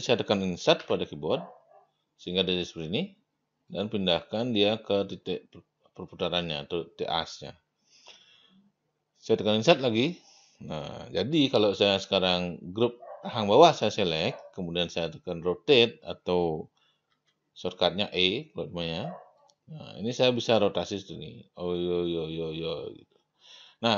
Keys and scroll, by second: 0.8 Insert, 9.7 Insert, 11.6 e, 17.1 e.